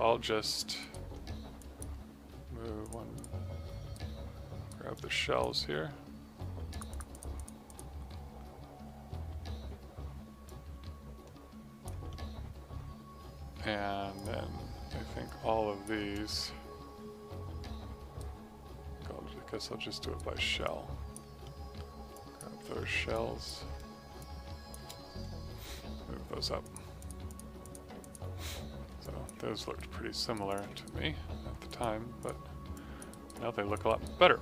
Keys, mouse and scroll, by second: 0.7 right click, 1.5 click, 3.9 right click, 4.9 click, 10.4 click, 14.1 click, 15.2 click, 18.1 right click, 20.6 click, 21.4 middle click, 22.1 click, 22.7 middle click, 23.1 click, 24.1 ctrl+shift+click, 26.5 click, 29.0 click, 29.5 q, 29.7 right click, 30.4 click, 30.7 alt+right click, 31.6 click, 32.7 click, 33.0 right click, 33.3 click, 33.8 right click, 34.1 middle click.